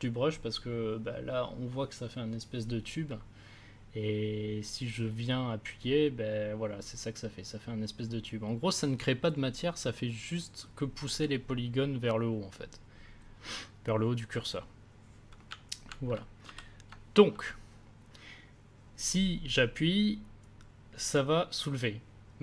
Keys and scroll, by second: 16.4 ctrl+z.